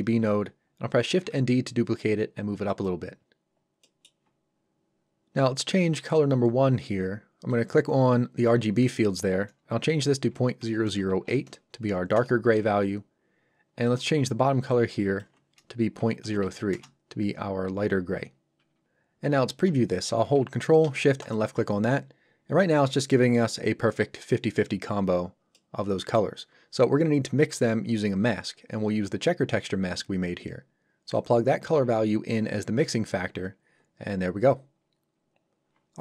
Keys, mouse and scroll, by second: 1.0 shift+d, 2.6 click, 3.2 scroll up 1, 3.8 middle click, 4.1-4.5 scroll up 1, 5.9 click, 10.3 KP_Decimal, 10.6 KP_0, 12.1 Return, 13.8 click, 16.0 KP_Decimal, 16.2 KP_0, 16.7 Return, 21.2 ctrl+shift+click, 25.5 middle click, 31.1 click.